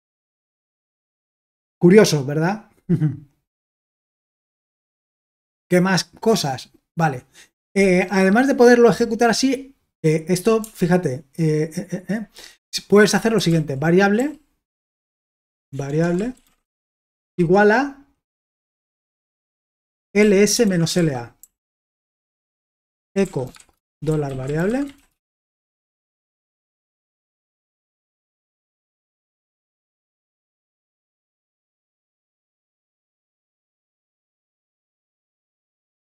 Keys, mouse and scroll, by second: 10.6 typing, 13.1-21.4 typing, 22.6 Return, 22.9-27.5 typing, 27.0 click, 28.8-31.7 typing, 29.6 ctrl+w, 33.8-34.8 typing, 34.9 Return.